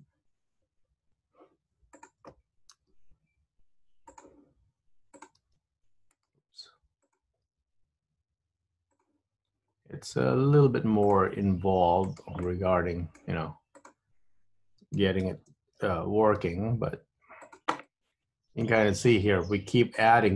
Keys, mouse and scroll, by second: 2.1 click, 2.9 g, 5.3 click, 5.5 g, 7.6 g, 11.1 click, 11.4 g, 12.5 middle click, 13.8 click, 15.4 ctrl+KP_1, 16.5 g, 17.9 middle click, 19.1 scroll up 2, 19.2-20.2 scroll down 5, 20.2 middle click.